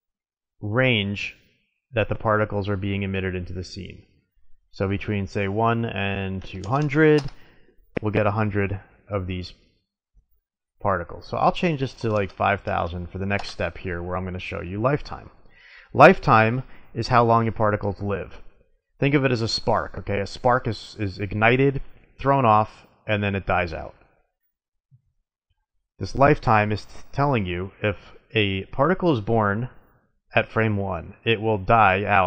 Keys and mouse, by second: 3.8-5.7 drag, 6.7 KP_0, 10.7-12.6 drag, 12.0 KP_0.